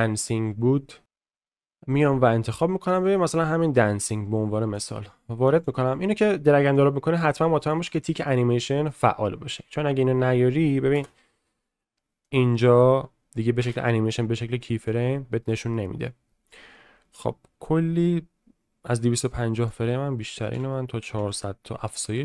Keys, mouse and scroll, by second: 10.9 space, 12.2 middle click, 14.8 click, 14.8 space, 15.4 middle click, 19.6-21.3 drag, 21.1 0.